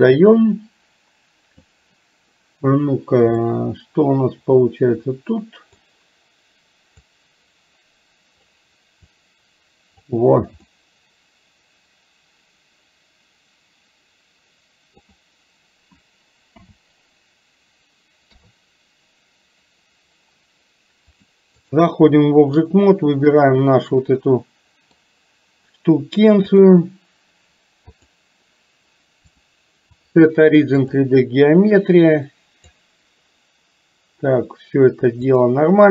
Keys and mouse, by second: 3.6-5.8 middle drag, 7.0 click, 7.6 click, 9.3 click, 10.7-15.1 middle drag, 16.5 KP_7, 18.4 KP_3, 21.1 click, 22.2 middle click, 24.2 middle click, 26.7 click, 28.0 click, 29.5-31.1 drag, 31.9 click, 35.4 click.